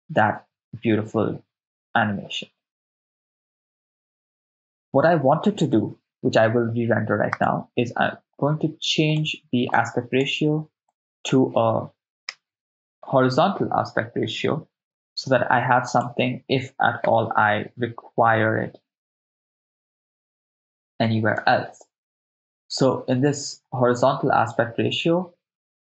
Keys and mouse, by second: 0.3 shift+space, 7.3 click, 9.1 click, 9.7 click, 10.9-20.0 drag, 13.2 BackSpace, 13.4 BackSpace, 13.6 BackSpace, 21.5 shift+space.